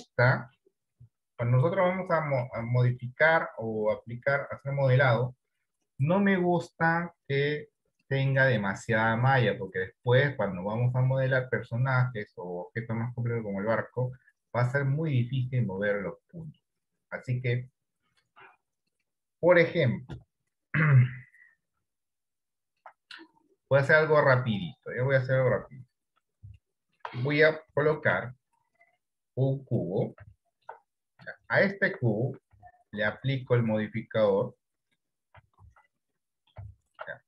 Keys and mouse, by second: 1.7 Tab, 2.8 Tab, 7.9 click, 8.6 click, 9.0 click, 9.5 click, 9.9 click, 18.5 click, 20.4 Delete, 22.0 d, 23.0 right click, 23.0 d, 25.0 middle click, 25.8 KP_1, 26.8 shift+middle click, 28.1 shift+a, 30.7 middle click, 31.8 shift+middle click, 33.3 ctrl+KP_2, 37.0 middle click.